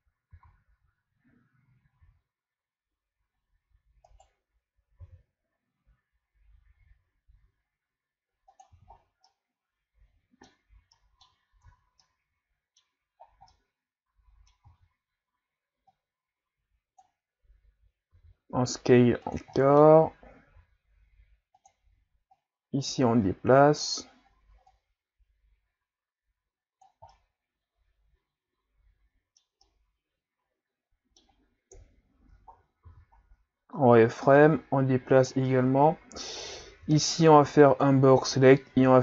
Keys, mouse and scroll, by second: 0.4 z, 2.0 s, 7.0 g, 8.8 z, 9.0 scroll down 1, 9.3-11.6 middle drag, 11.6 Tab, 12.0-13.2 middle drag, 13.2 scroll up 2, 13.5-14.6 middle drag, 14.6 Tab, 15.9-18.1 drag, 18.1 s, 19.6 middle click, 20.5 s, 22.3-27.1 drag, 27.1-31.8 middle drag, 31.8 KP_3, 32.6 scroll down 2, 32.9 z, 33.3-33.7 scroll up 1, 34.4-35.6 drag, 35.6 scroll up 4, 36.4 right click, 36.8 b, 38.7 g.